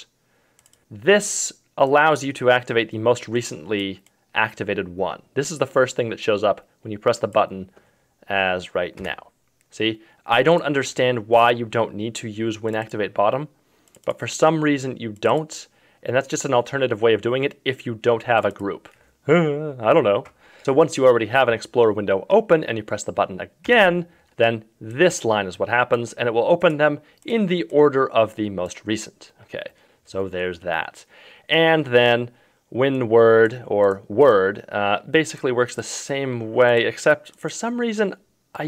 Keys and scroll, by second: 9.0 F1.